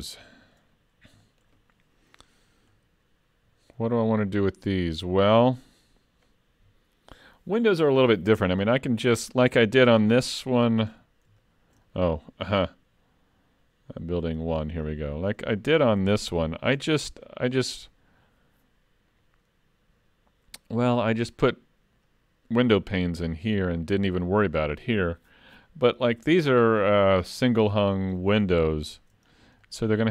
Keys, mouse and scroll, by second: 0.7 scroll down 2, 1.3 shift+middle click, 10.0-10.3 scroll down 5, 10.9-11.4 scroll down 7, 11.4 shift+middle click, 11.9 middle click, 14.4 click, 15.0 middle click, 15.5 shift+middle click, 16.9 scroll up 1, 17.3 middle click, 26.6-28.5 scroll up 1, 28.5 scroll up 3, 28.6 shift+middle click, 29.3-29.6 scroll down 5.